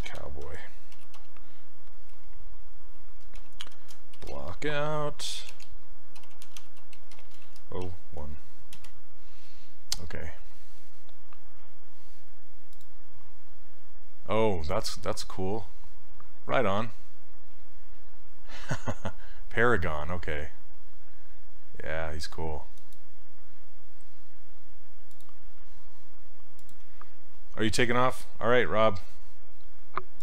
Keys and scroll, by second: 0.0-2.2 typing, 3.4-8.7 typing, 8.8 Return.